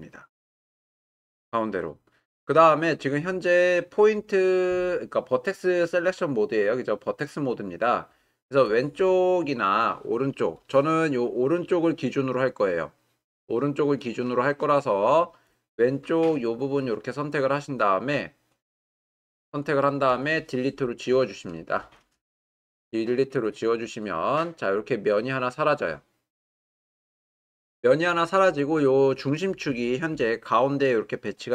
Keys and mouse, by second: 6.2 click, 8.8-9.8 drag, 10.7 click, 15.7-18.2 drag, 19.1-20.2 drag, 22.6 Delete.